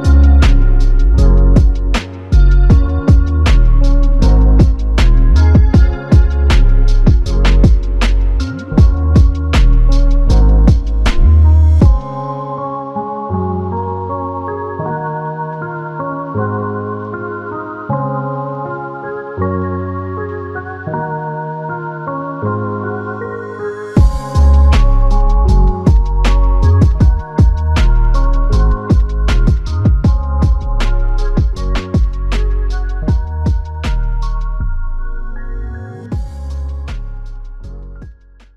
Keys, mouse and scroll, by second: 0.4 alt+shift+click, 1.1 alt+click, 9.2 alt+p, 11.6 ctrl+i, 12.6 alt+click, 15.8 f, 16.9 alt+click, 20.8 alt+click, 21.2 shift+click, 23.1 alt+m, 24.2 alt+shift+click, 24.9 alt+click, 28.8 alt+click, 35.3 shift+click, 36.5 shift+click, 37.5 alt+click.